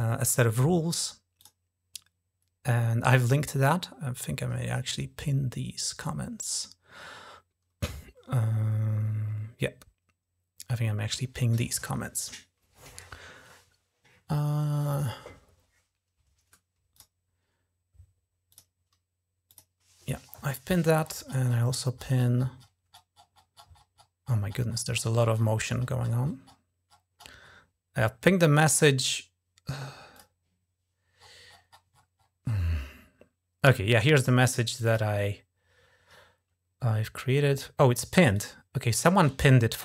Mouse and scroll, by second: 1.3 click, 16.8 click, 18.3 click, 19.3 click, 20.0-20.7 scroll up 6, 20.7 scroll down 2, 20.7-21.3 scroll up 5, 21.3 scroll down 2, 21.5-24.3 scroll up 14, 24.3 scroll down 2, 24.4 scroll up 1, 24.5 scroll down 1, 24.6-27.6 scroll up 10, 30.0 click, 31.0-33.5 scroll up 7, 34.7 click, 38.2 click.